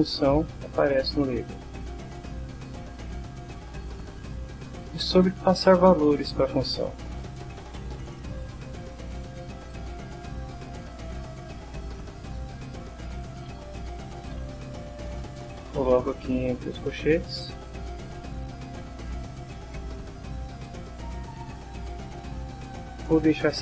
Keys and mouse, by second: 1.6 click, 2.5 click, 3.4-4.4 drag, 5.1-6.2 drag, 8.4 click, 11.1-12.2 drag, 12.8-14.3 typing, 15.0 Left, 17.0 End, 17.4 Down, 17.7 End, 18.2-20.3 typing, 20.6 Down, 21.1 Down, 22.1 Up, 23.0 Left.